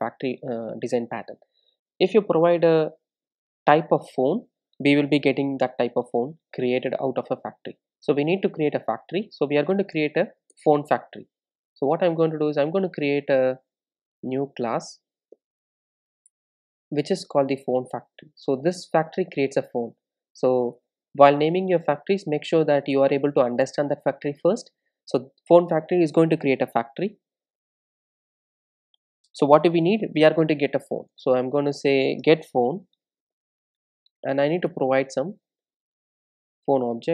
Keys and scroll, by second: 10.6 alt+Return, 15.4 super+n.